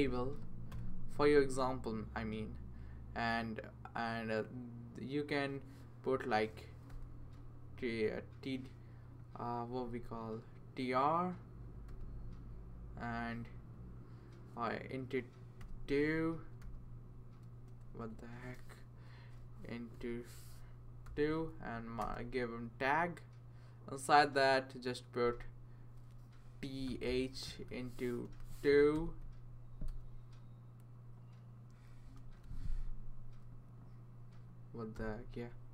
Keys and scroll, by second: 0.0-2.0 typing, 6.9 t, 11.9 r, 15.6 8, 16.6 2, 17.5 BackSpace, 17.9 BackSpace, 19.9 *, 21.0 2, 22.0 Tab, 25.2 Return, 26.6-27.6 typing, 28.9 2, 29.9 BackSpace, 32.2 *, 34.9 2.